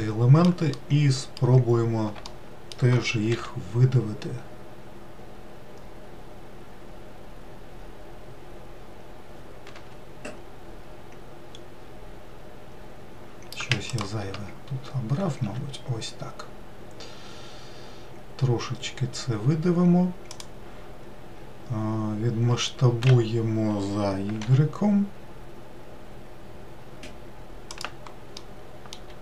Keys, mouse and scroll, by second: 0.5-1.6 middle drag, 1.6-2.0 scroll down 1, 2.0-3.0 shift+middle drag, 3.0 e, 11.2-11.7 scroll up 2, 13.6 shift+click, 14.4-15.1 scroll down 1, 15.2 e, 22.2 s, 28.1-29.2 middle drag.